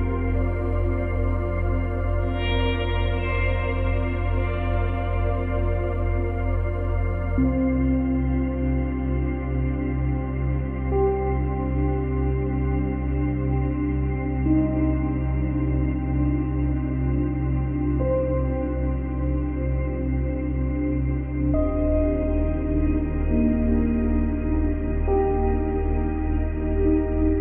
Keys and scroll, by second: 2.9 space, 4.1 space, 12.3 ctrl+z.